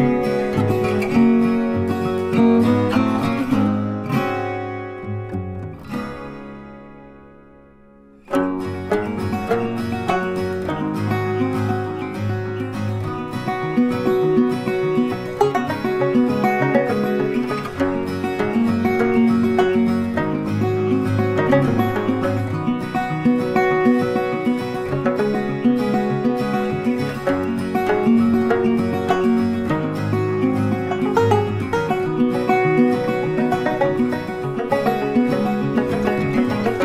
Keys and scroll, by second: 19.6 Delete, 21.0 ctrl+d, 32.6 ctrl+t.